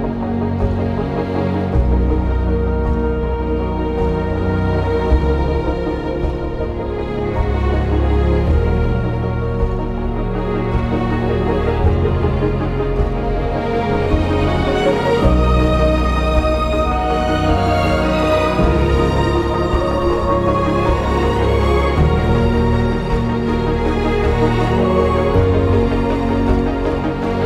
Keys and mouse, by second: 2.0 ctrl+b, 10.9 2, 12.5 o, 13.0 g, 18.1 click, 20.0 g, 22.1 click, 23.9 ctrl+b.